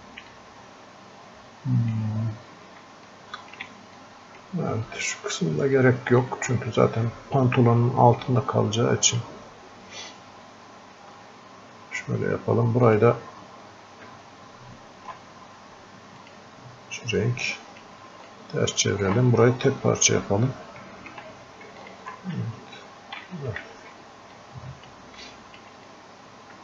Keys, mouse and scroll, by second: 0.3-3.1 drag, 3.1 alt+click, 4.0-5.8 drag, 5.8-8.5 drag, 8.8-11.6 drag, 12.6-18.3 drag, 18.3-20.9 ctrl+shift+drag, 20.9 ctrl+w, 21.9 ctrl+shift+click, 23.7 f, 24.4 click, 25.3 alt+click, 25.9-26.6 drag.